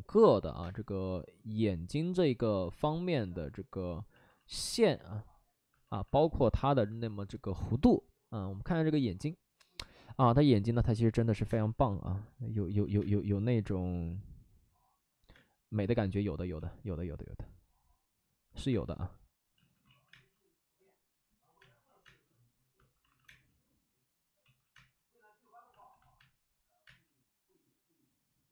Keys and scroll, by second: 0.5 space, 1.0 space, 2.2 ctrl+z, 11.4 space, 12.8 ctrl+z, 12.9 space, 15.3 space, 16.5 space, 18.6 space, 19.5 ctrl+z, 19.8 ctrl+z, 20.0 space, 21.5 space, 23.0 alt+s, 23.2 space, 24.4 ctrl+z, 24.7 space, 25.7 alt+s, 26.1 space, 26.8 space.